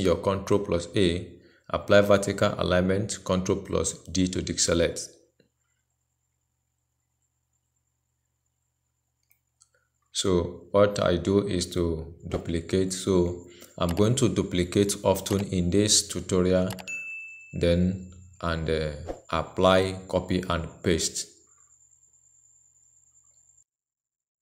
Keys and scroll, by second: 4.3 ctrl+d, 15.0 ctrl+c, 20.4 ctrl+a, 21.9 ctrl+v.